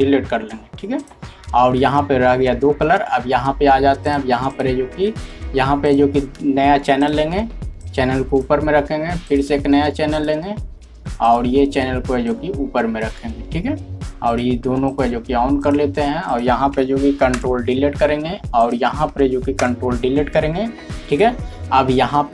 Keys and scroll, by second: 1.1 typing, 17.3 ctrl+Delete.